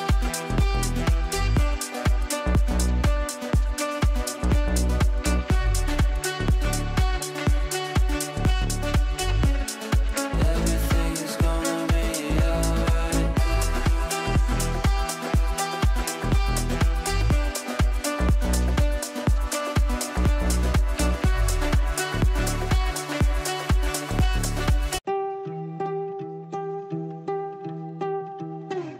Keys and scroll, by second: 2.0 Delete, 21.7 Down, 21.8 Right, 22.2 Down, 22.5 Right, 22.6 Down, 23.1 Left, 26.9 Right.